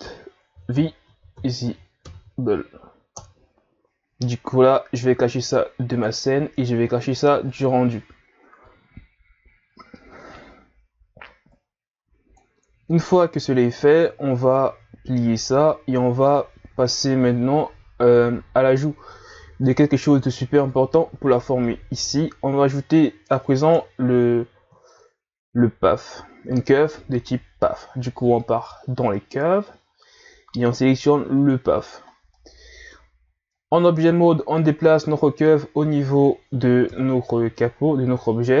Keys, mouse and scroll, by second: 5.9 click, 7.5 click, 11.5-13.0 drag, 13.0-14.7 scroll down 2, 14.7-15.3 scroll down 1, 15.3-16.8 drag, 16.8-18.5 scroll up 2, 18.5-19.1 scroll down 2, 19.1-21.0 middle drag, 21.0 scroll up 1, 23.7 KP_1, 24.9 shift+a, 32.1 scroll down 1, 32.3-33.2 middle drag, 33.2 scroll down 1, 33.5-34.9 middle drag, 34.9-36.9 drag, 36.9 KP_1, 37.7-38.6 scroll up 2.